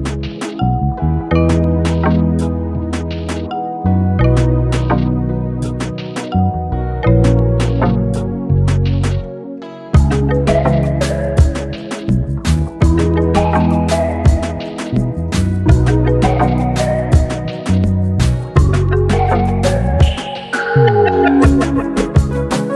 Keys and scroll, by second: 13.4 g.